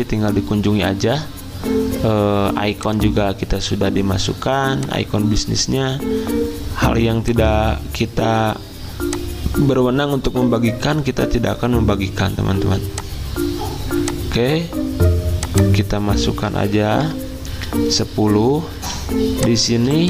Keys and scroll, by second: 11.2 alt+Tab, 12.6 z, 16.3-17.2 typing, 18.8 z, 19.9 v.